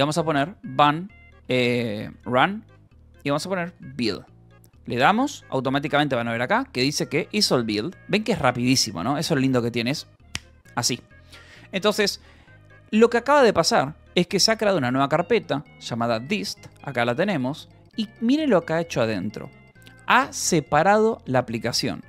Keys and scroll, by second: 0.0-4.0 typing, 4.1 Return, 8.2 Return, 13.9-16.3 typing, 14.9 Return, 19.0 Return, 19.7 j.